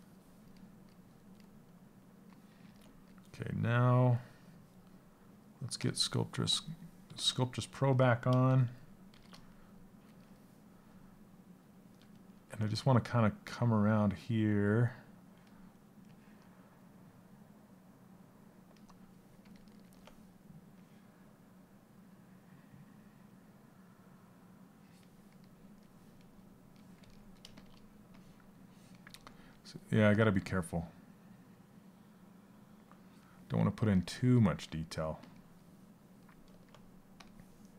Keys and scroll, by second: 8.1 shift+f.